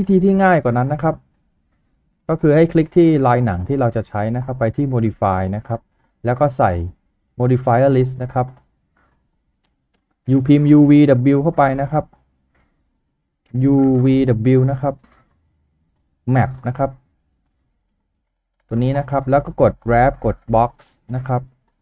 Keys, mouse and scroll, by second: 10.2-11.2 typing, 17.3-18.1 typing.